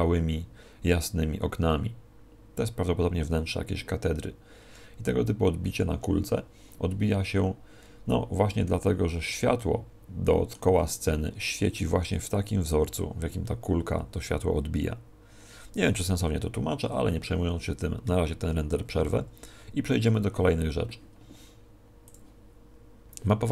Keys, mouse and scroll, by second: 20.0 Escape, 22.0 click.